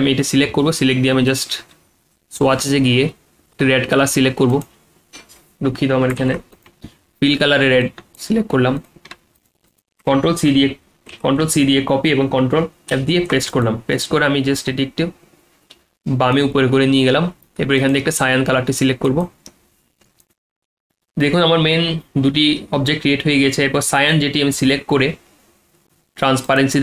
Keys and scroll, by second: 6.2 ctrl+z, 10.5 ctrl+x, 11.1 ctrl+z, 11.4 ctrl+c, 12.9 ctrl+f.